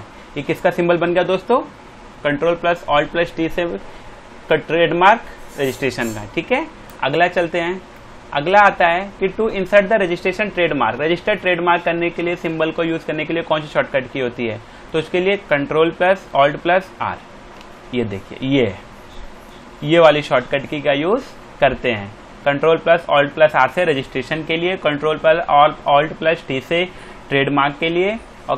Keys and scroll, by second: 6.8 Return, 7.8 alt+Tab, 8.4 space, 14.8 alt+Tab, 17.1 r.